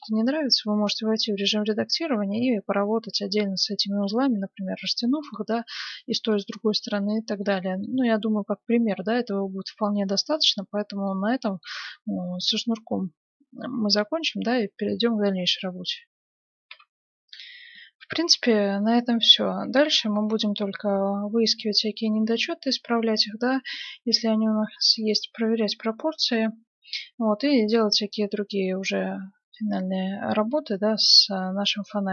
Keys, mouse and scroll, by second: 0.6 Tab, 5.0-7.4 middle drag, 6.2 Tab, 7.6-9.1 middle drag, 9.6 middle click, 11.0-12.9 middle drag, 16.7 F9, 20.9 middle click, 21.9-24.1 middle drag, 25.7-27.2 middle drag, 28.9-31.5 middle drag, 31.8-32.1 middle drag.